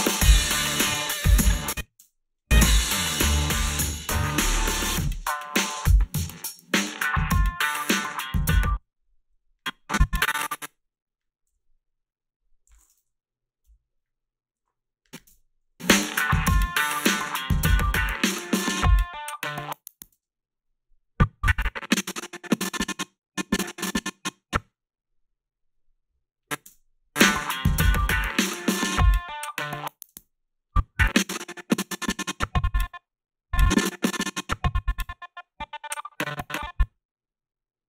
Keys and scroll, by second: 1.4 space, 2.0 space, 8.4 space, 11.5 g, 13.7 Delete, 15.3 space, 20.1 space, 26.7 space, 30.1 space.